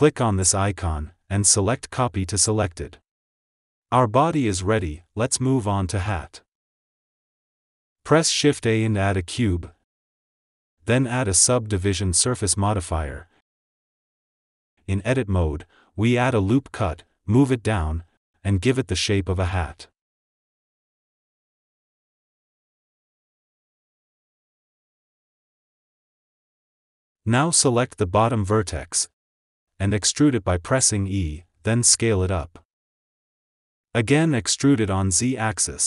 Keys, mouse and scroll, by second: 0.0-3.5 drag, 4.2 click, 4.7 click, 6.5 shift+right click, 6.9-7.8 shift+middle drag, 7.8 scroll up 4, 8.2 shift+a, 14.3 ctrl+s, 14.9 Tab, 15.7 scroll down 2, 16.2 shift+middle click, 16.3 ctrl+r, 16.6 ctrl+r, 17.6 click, 17.7 g, 19.8 click, 20.1 g, 21.1 click, 21.7 s, 23.1 Tab, 24.0 alt+z, 24.4 click, 25.0 click, 25.4 Tab, 27.5 click, 28.2 alt+z, 28.5 click, 29.9 e, 30.6 e, 31.6 s, 31.7 s, 33.2 e.